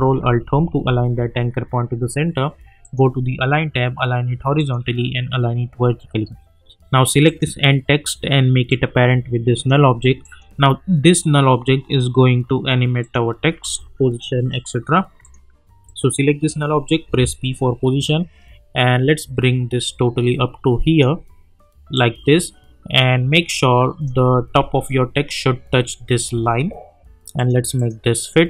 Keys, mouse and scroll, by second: 0.6 ctrl+alt+Home, 2.8 click, 7.2-10.2 drag, 13.0 click, 15.2 click, 17.0 p, 18.0-24.7 drag, 24.7-25.4 alt+scroll up 1, 26.3 scroll down 2, 27.4 click.